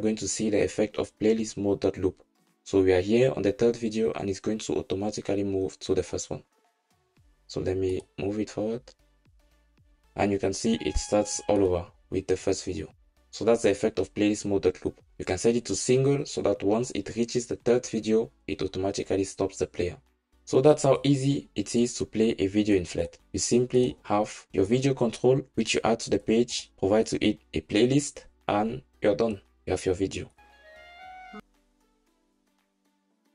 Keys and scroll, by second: 23.9 shift+Escape.